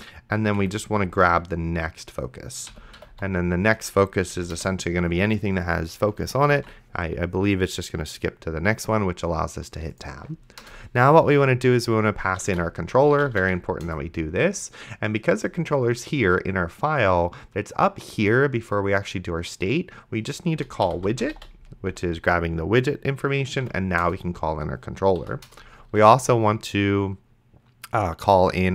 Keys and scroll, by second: 0.6 Right, 2.5-3.6 typing, 4.4 Down, 4.6 Return, 6.8 ctrl+s, 10.6 Return, 12.1-13.9 typing, 20.6-22.4 typing, 23.6 c, 24.0 Return, 25.2 End, 25.5 Return.